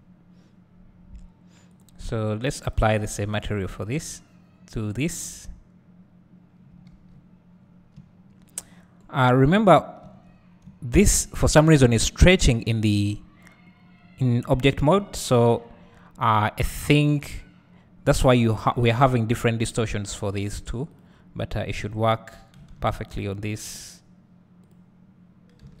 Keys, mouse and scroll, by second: 1.8 click, 3.2-9.3 drag, 7.5 scroll down 1, 7.9 `, 10.0 Tab, 11.3 scroll up 1, 14.8 Tab, 15.1 scroll down 2, 15.7-16.9 scroll up 2, 16.9 click, 22.1 click, 23.1 ctrl+z, 23.2 click, 24.0-25.8 drag, 25.6 alt+a.